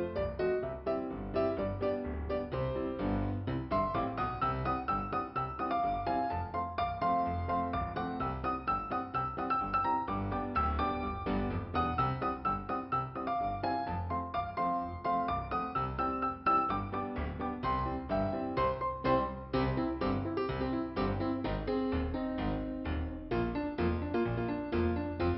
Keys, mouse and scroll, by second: 2.3 click, 3.0 click, 6.7 click, 7.7 click, 8.2 click, 12.7 click, 12.8 click, 13.7 click, 18.0 click, 18.1 click, 19.1 click, 22.4 click, 22.5 click, 23.3 click, 24.5 click.